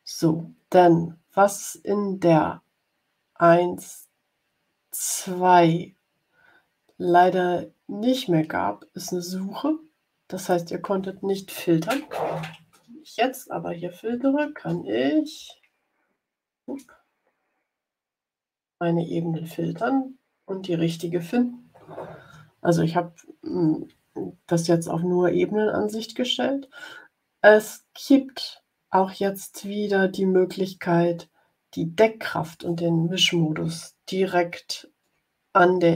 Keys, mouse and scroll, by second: 10.3 click, 13.5-15.1 typing, 16.5 Return, 20.8 click, 33.7 ctrl+scroll down 2, 34.2 ctrl+scroll down 2, 35.3-35.9 drag.